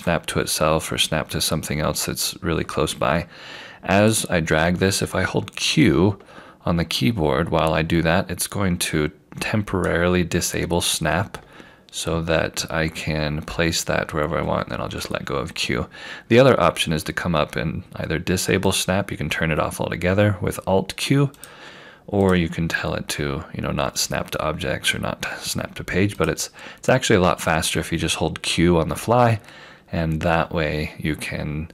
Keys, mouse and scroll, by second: 0.1 click, 18.7 click, 26.2 click, 29.2 scroll down 1, 31.0-31.7 scroll up 1.